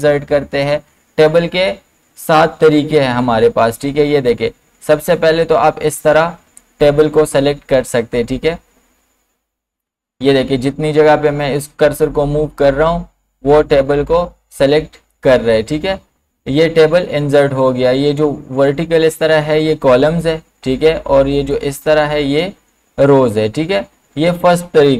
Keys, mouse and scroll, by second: 15.1 click, 19.2 click, 21.5 click.